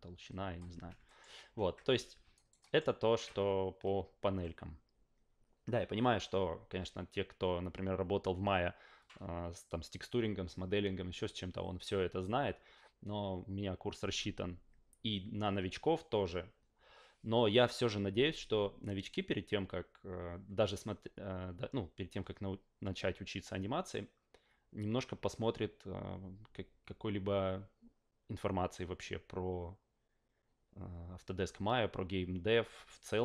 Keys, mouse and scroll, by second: 0.7 ctrl+z, 1.0 alt+middle click, 1.3 ctrl+a, 2.3 alt+right click, 2.6 alt+middle drag.